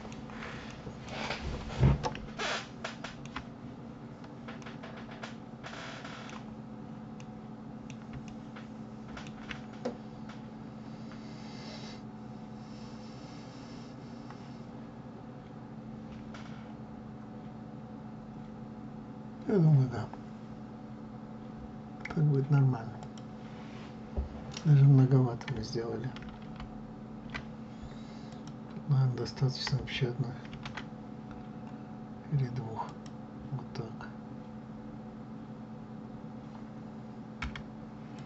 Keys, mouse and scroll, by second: 3.6-4.5 scroll up 1, 4.5-6.4 middle drag, 6.4 scroll down 2, 7.1-11.2 middle drag, 13.0-13.3 scroll up 2, 19.2 scroll down 2, 21.0-21.4 scroll up 2, 22.9 click, 28.2 click, 30.4 ctrl+r, 38.1 click.